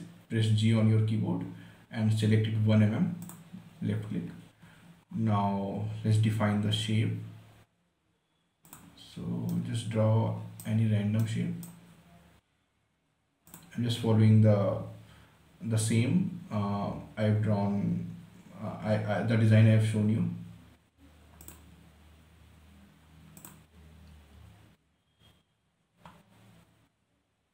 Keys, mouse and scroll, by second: 1.0 g, 3.6 click, 4.6 scroll up 1, 5.0 scroll down 1, 5.4 scroll up 1, 9.0 click, 9.8-12.2 right drag, 12.2 scroll down 1, 13.8 click, 21.7 click.